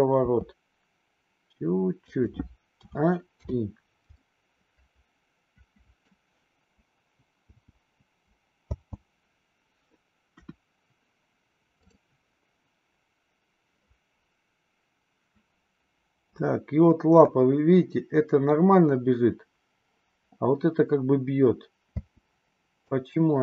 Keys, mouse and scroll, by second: 0.2 r, 2.7 a, 3.4 i, 4.1-6.1 middle drag, 7.3 i, 8.6 space, 10.3 KP_1, 22.0 space, 22.7-23.4 drag.